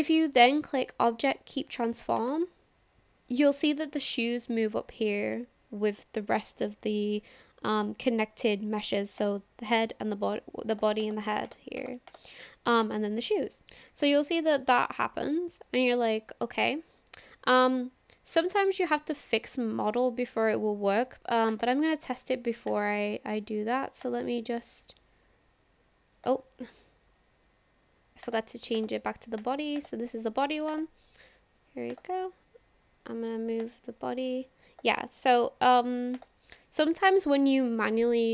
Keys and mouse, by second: 9.2 click, 11.0 click, 11.4 click, 11.8 click, 12.1 click, 12.9 click, 21.5 click, 22.7-23.1 drag, 24.2-26.3 drag, 27.3 ctrl+z, 28.4 click, 28.7-29.9 drag, 30.7 click, 33.6-34.8 drag, 35.9 ctrl+z, 36.3 click.